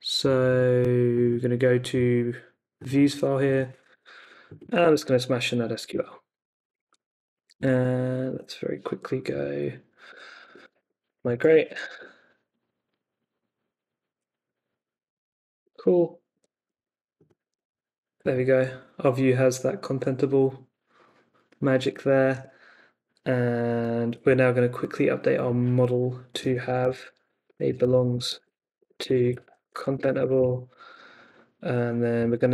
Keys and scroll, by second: 3.9 t, 4.6 super+a, 5.0 super+v, 5.9 super+s, 7.6 super+Tab, 9.3 Up, 10.1-12.3 typing, 15.7 super+Tab, 17.4 super+r, 22.3 super+Tab, 26.3 Escape, 26.8-30.8 typing, 31.9-32.5 typing.